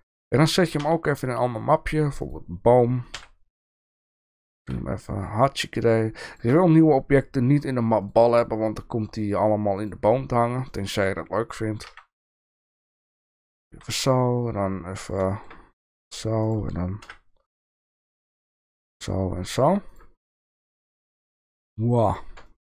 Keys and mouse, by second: 0.8 m, 3.1 KP_3, 4.3 r, 9.7 click, 10.8 shift+middle drag, 11.8 g, 13.1 middle drag, 13.7 s, 15.3 shift+middle drag, 15.9 g, 17.0 KP_1, 18.7 g, 20.2 shift+middle click, 20.8 s, 22.4 shift+middle click.